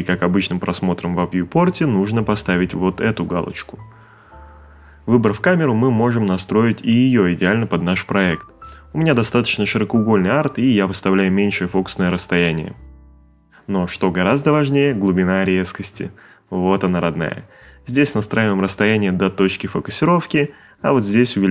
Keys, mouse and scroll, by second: 1.1 click, 2.6 click, 4.4 middle click, 5.2 ctrl+middle click, 6.5 click, 11.5 ctrl+middle click, 13.0 middle click, 13.9 middle click.